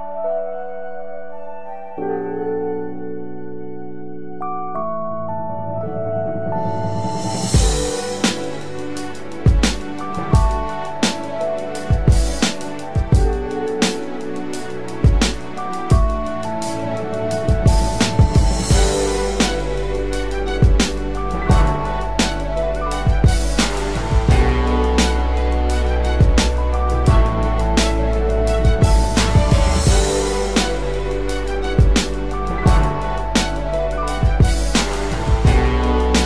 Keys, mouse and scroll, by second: 5.0 alt+shift+click, 5.1 alt+shift+right click, 6.1 alt+shift+click, 11.5 alt+shift+click, 14.5 Up, 14.7 Up, 15.0 Up, 15.2 Up, 15.5 Return, 16.1 Down, 16.2 Down, 17.4 ctrl+=, 17.6 ctrl+=, 18.0 space, 26.3 Right, 27.4 Right, 27.8 Right, 27.9 Right, 31.8 double click, 34.3 ctrl+=, 34.4 ctrl+=, 34.6 ctrl+=, 34.7 ctrl+=, 34.8 ctrl+=, 35.2 space.